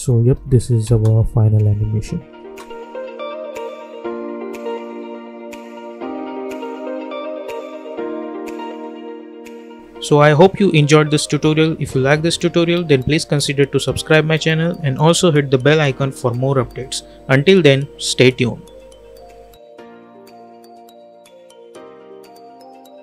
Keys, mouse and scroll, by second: 0.8 space.